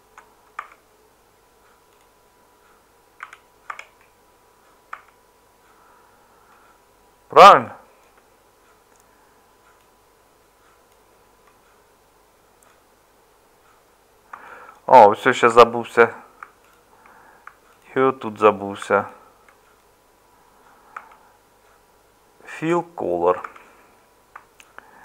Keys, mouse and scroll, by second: 0.6 Tab, 3.2 a, 3.7 Tab, 4.9 Tab, 15.5 Tab, 21.0 Tab, 23.4 Tab.